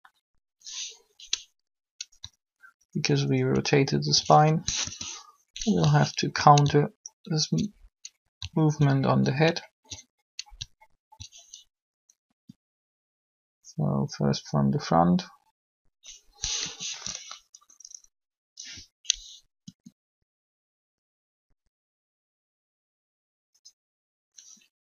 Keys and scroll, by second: 4.7 alt+shift+1, 12.2 alt+shift+r, 16.5 7, 19.6 r.